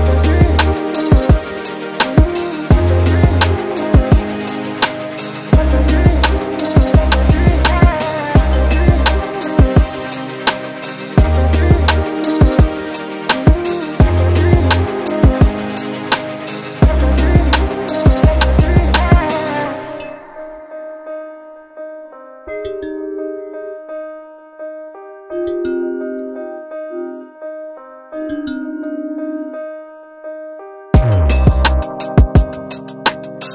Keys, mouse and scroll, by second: 0.8 click, 1.5 typing, 2.2 Return, 2.8 scroll down 1, 3.1 alt+click, 3.5 alt+middle click, 4.0-4.5 alt+drag, 5.4 alt+click, 5.7-6.2 scroll down 3, 7.1 click, 7.9-8.9 typing, 9.4 scroll up 2, 10.0 scroll down 2, 10.3 alt+click, 10.7 alt+middle click, 11.0 scroll up 1, 11.3 alt+middle click, 11.6 scroll up 2, 12.4-13.1 scroll up 3, 14.0-25.4 drag, 25.7 scroll down 1, 25.9 alt+click, 26.4 alt+click, 26.7 shift+right click, 27.3-27.8 scroll up 7, 27.8 alt+click, 28.4-29.4 alt+drag, 29.7 shift+right click, 30.4 scroll down 2, 30.6 alt+click, 31.8-33.4 alt+drag.